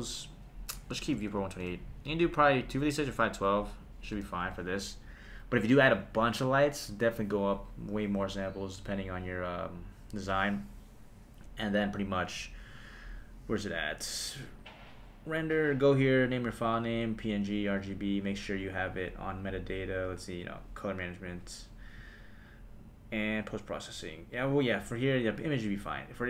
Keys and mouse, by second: 0.3-1.6 drag, 2.6 click, 3.5 click, 14.6 click, 18.9 click, 20.6 click, 23.4 click.